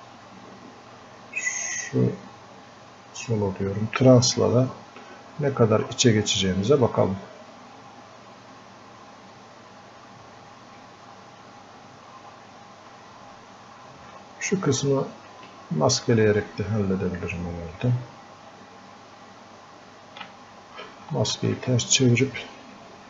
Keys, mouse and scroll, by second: 0.0-7.3 drag, 7.6-8.6 drag, 9.5-11.4 drag, 12.0 click, 14.7 alt+click, 15.6-23.0 ctrl+drag.